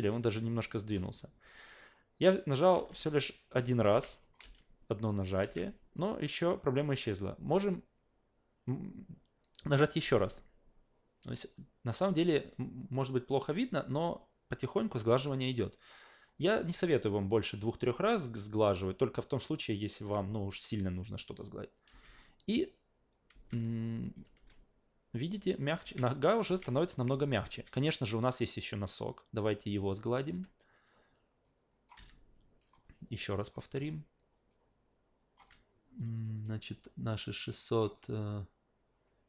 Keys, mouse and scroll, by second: 2.2 shift+click, 2.7 alt+shift+v, 3.9 alt+shift+v, 4.2 shift+click, 4.4 alt+shift+v, 5.4 alt+shift+v, 5.8 shift+click, 9.8 shift+click, 21.2 shift+click, 21.9 alt+shift+v, 23.3 alt+shift+v, 24.0 shift+click, 24.3 alt+shift+v, 25.8 alt+shift+v, 26.3 shift+click, 26.5 alt+shift+v, 27.1 alt+shift+v, 27.5 shift+q, 28.5 shift+click, 30.3 shift+a, 31.4 shift+click, 31.9 shift+f, 32.6 shift+click, 33.4 shift+click, 34.5 shift+click, 35.4 shift+f, 36.0 shift+click, 37.1 shift+click.